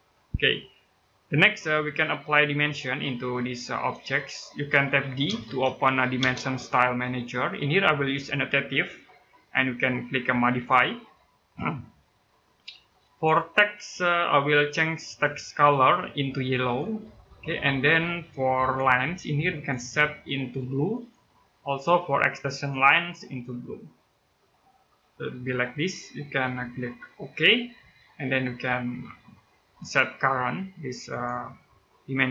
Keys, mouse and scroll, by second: 0.3 middle click, 5.1 d, 6.0 space, 7.9 click, 27.2 click, 30.9 click.